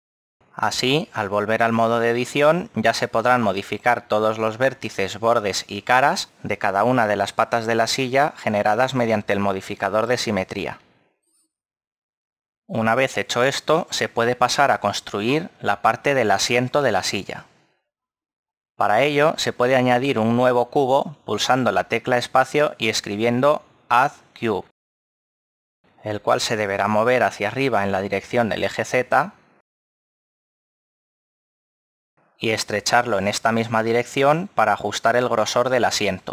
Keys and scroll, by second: 2.6 Tab, 12.4 ctrl+z, 28.3 g, 28.9 z.